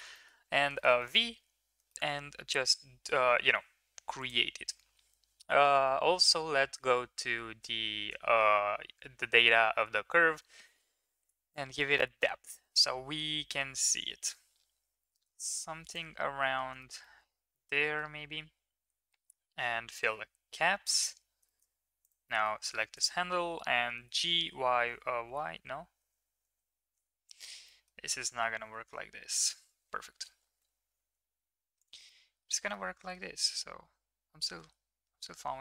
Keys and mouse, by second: 0.0 middle drag, 0.7 shift+middle click, 1.0 middle click, 1.8 shift+middle click, 11.5-15.9 shift+drag, 16.3 middle click, 16.8 shift+middle click, 17.0-17.9 middle drag, 20.8 click, 21.4 shift+middle click, 22.0 click, 22.2 middle click, 22.8 shift+middle click, 23.9 g, 27.6 middle click, 28.8 KP_7, 30.3 g, 32.0-32.4 middle drag, 32.8-33.2 middle drag, 34.3 g.